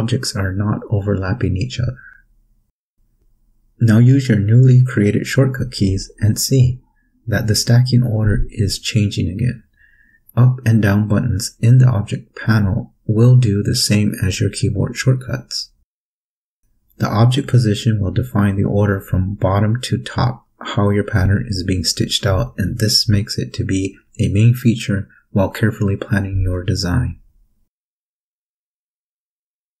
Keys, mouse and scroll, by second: 6.5 Page_Up, 7.5 Page_Down, 8.5 Page_Up, 11.1 click, 12.3 click, 13.4 click.